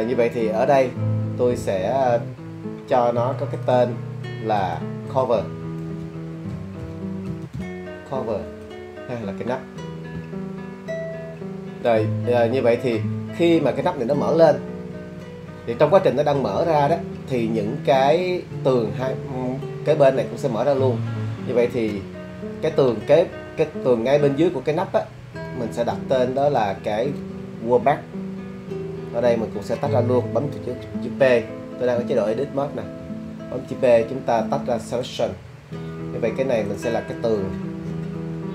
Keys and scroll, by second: 6.5-7.5 typing, 8.5 Return, 33.0 p.